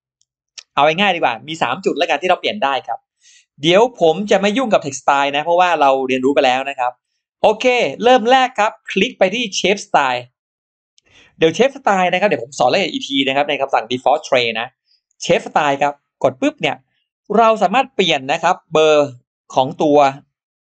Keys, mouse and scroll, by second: 0.6 click, 7.6 shift+right click, 7.7 shift+right click, 8.9 click, 15.6 click, 19.3 click, 20.6 click.